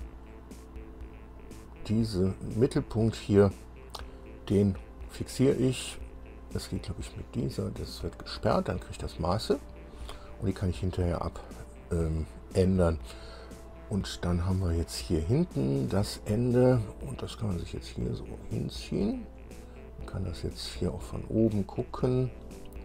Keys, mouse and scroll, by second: 1.6 click, 8.2 click, 10.4 scroll down 1, 12.0 scroll up 1, 14.4-14.7 scroll up 1, 15.3 scroll up 1, 16.0 scroll up 2, 17.4-19.4 drag, 19.6-19.9 scroll down 2, 20.3 scroll down 2, 20.8-21.9 drag, 22.1-22.5 scroll up 2.